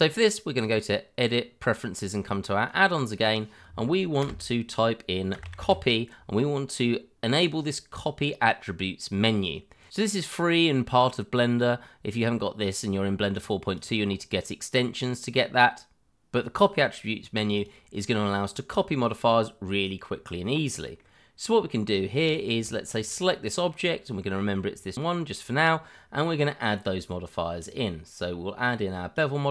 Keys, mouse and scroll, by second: 0.5 click, 4.2 BackSpace, 5.3 c, 5.4 o, 5.6 p, 13.3 click, 13.8 double click, 17.6 click, 20.2 middle click, 21.4-22.2 scroll up 1, 22.2 click, 22.6 shift+middle click, 22.7 middle click, 22.7 shift+middle click, 23.0-23.4 scroll up 1, 23.4 middle click, 24.3-24.9 scroll down 1, 24.9 middle click, 27.6 click.